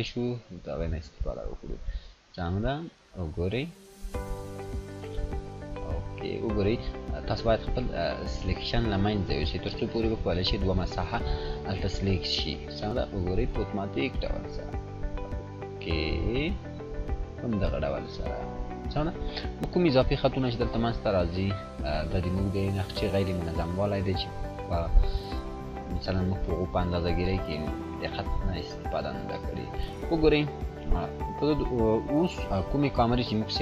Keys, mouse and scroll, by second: 1.6 click, 10.2 click, 16.7 click, 17.8-18.6 scroll up 1, 20.4-29.2 drag, 29.5 scroll down 1, 31.5-33.4 drag.